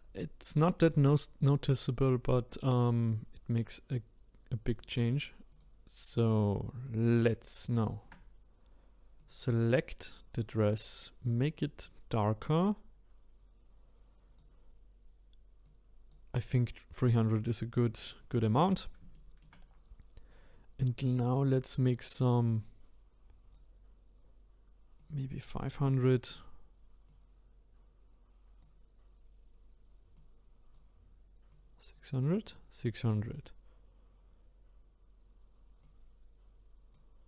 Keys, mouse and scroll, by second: 4.7 click, 10.3 click, 15.6-17.1 drag, 18.0 click, 18.5-19.1 scroll up 1, 19.1 shift+middle click, 19.9-20.3 scroll down 1, 22.0-34.6 drag, 35.8-37.2 drag.